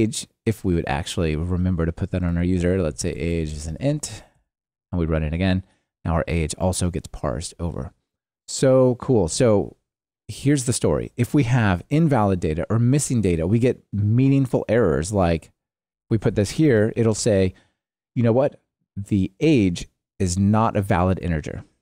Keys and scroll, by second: 4.6 ctrl+r, 16.7 ctrl+r.